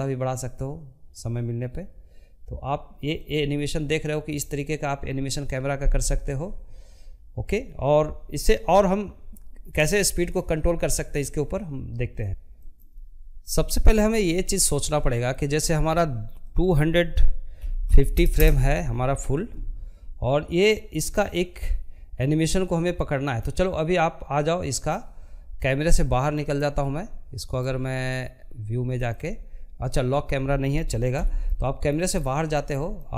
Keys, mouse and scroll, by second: 1.6-5.4 drag, 18.7-21.9 drag, 24.9-27.4 drag, 29.1 n, 29.5 middle click, 30.1-30.5 scroll down 2, 30.5-32.0 shift+middle drag, 32.0 scroll up 1, 32.3 shift+middle click.